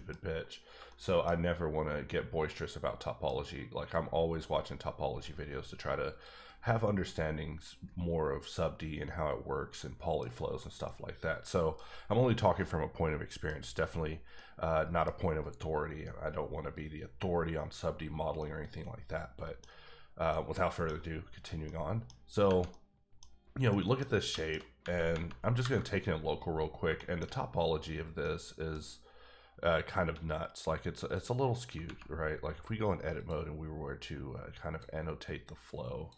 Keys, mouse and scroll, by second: 1.1 shift+scroll down 1, 1.3 scroll up 2, 1.8-2.5 scroll down 1, 2.5 middle click, 6.1 click, 7.0 click, 8.0-8.5 scroll down 2, 8.5 middle click, 10.8 middle click, 12.6 middle click, 13.7-14.3 scroll up 1, 14.3 middle click, 18.3 middle click, 18.5 middle click, 20.4 middle click, 22.0 middle click, 23.0 middle click, 23.9 middle click, 24.3 shift+middle click, 25.6 KP_Divide, 26.4-26.8 scroll up 3, 27.0 shift+middle click, 27.6-28.2 scroll down 1, 28.2 middle click, 28.7 scroll down 1, 28.8-30.0 scroll up 1, 31.0 click, 33.1 click, 34.0 click, 35.2 click.